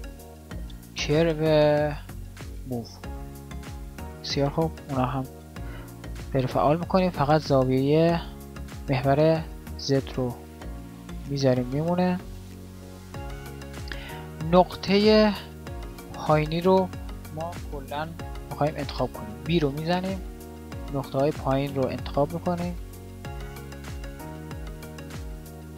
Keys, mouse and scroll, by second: 0.4 a, 19.5 b.